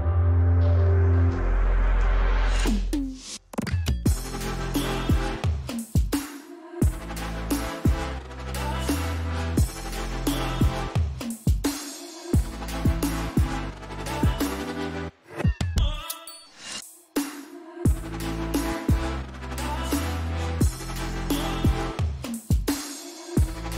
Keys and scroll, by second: 3.3-4.5 typing, 8.8-9.9 typing.